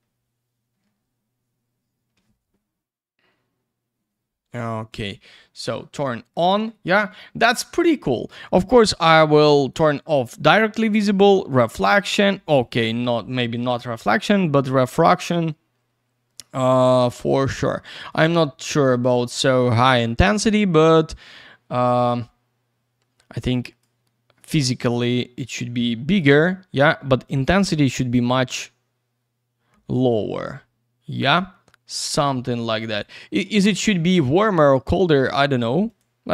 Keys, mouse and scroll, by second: 4.9 click, 5.0 click, 9.3 click, 9.4 click, 11.3 click, 11.5 click, 12.6 click, 12.7 click, 14.8 click, 14.9 click, 18.1 click, 20.7 click, 24.7 click, 27.2 click, 32.8 click, 32.9 click, 33.8 click, 33.9 click, 35.1 click, 35.2 click, 35.8 click, 36.0 click.